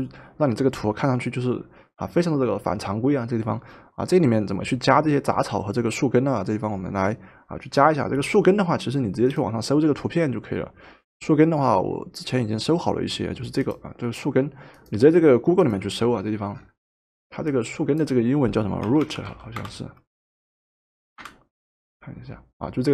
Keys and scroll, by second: 18.6-19.9 typing, 20.9 typing, 21.2 Return.